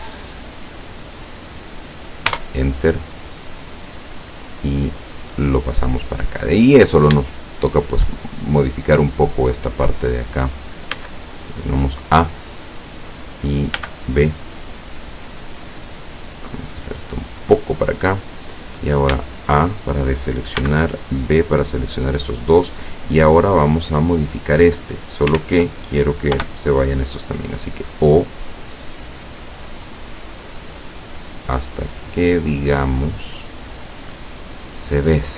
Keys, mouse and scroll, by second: 2.4 Return, 3.8-6.7 drag, 6.7-7.1 scroll down 1, 7.3 shift+middle click, 8.2-8.8 shift+scroll up 1, 11.0 a, 11.6-12.6 middle drag, 13.8 b, 14.3 click, 15.7-17.3 drag, 17.5-18.5 middle drag, 18.6 scroll down 1, 19.2 a, 19.7-20.1 scroll up 1, 20.7 b, 21.2 click, 22.6 click, 23.3-25.1 drag, 25.5 ctrl+z, 26.4 o, 28.2-34.0 drag, 34.2-35.3 middle drag.